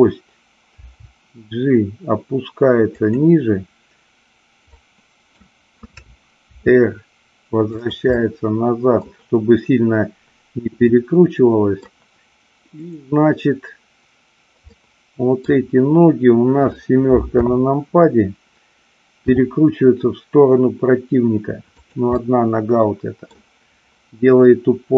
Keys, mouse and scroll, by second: 0.7 g, 3.0 click, 4.7 middle click, 6.4 r, 7.8 drag, 8.2-9.0 middle drag, 10.8-11.8 middle drag, 12.8-14.2 drag, 14.7-15.4 middle drag, 17.3 KP_7, 19.2 r, 21.8 click, 22.2-23.3 middle drag.